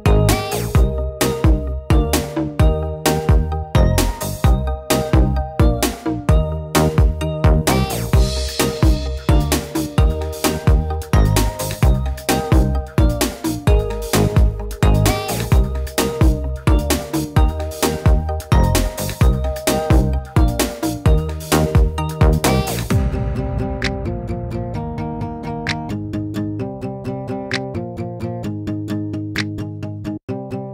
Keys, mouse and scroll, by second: 0.8-1.2 drag, 1.5-1.9 drag, 2.3-4.2 middle drag, 4.2 click, 5.4 ctrl+z, 5.9 s, 9.5 shift+d, 12.1 click, 13.0 click, 15.0 m, 15.5 middle click, 16.1 click, 16.6 m, 17.0 click, 17.8 BackSpace, 18.4 m, 19.4 middle click, 19.7 click, 20.1 click, 20.7-21.1 drag, 21.3-22.1 middle drag, 22.1 shift+d, 25.4 middle drag, 26.0 click, 28.4-28.8 drag, 29.8 middle click, 30.5 right click.